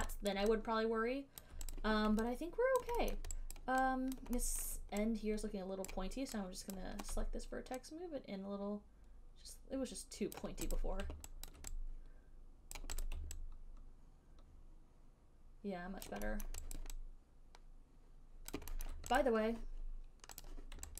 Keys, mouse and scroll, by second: 0.6 alt+right click, 1.7 alt+click, 2.1 click, 3.1 alt+click, 3.4 alt+middle click, 3.9 alt+click, 4.5 alt+click, 4.9 alt+middle click, 6.3 right click, 7.0 click, 10.6 click, 11.1 click, 11.8 alt+click, 11.9 alt+click, 13.0 right click, 13.3 click, 16.4 alt+click, 16.7 alt+middle click, 17.1 alt+right click, 18.8 alt+click, 19.2 alt+middle click, 19.5 click, 20.7 click.